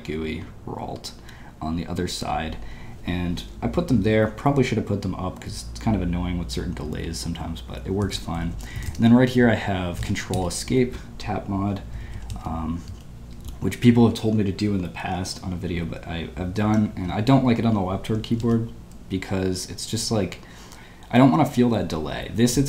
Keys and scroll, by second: 8.1-10.8 typing, 12.1 typing, 18.2 typing.